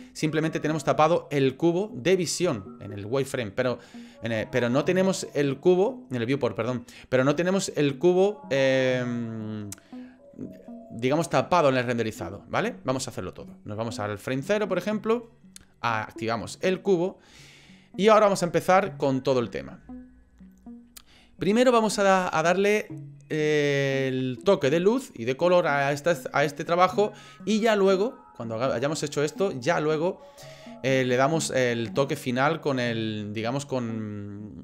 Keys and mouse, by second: 13.5 click, 16.5 click.